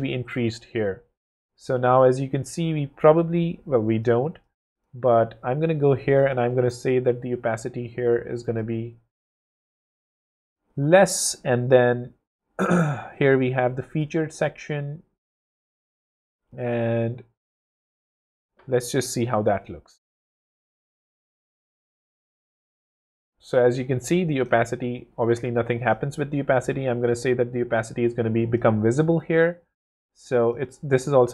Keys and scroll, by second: 6.3 0, 13.6 Escape, 19.2 w, 27.0 0.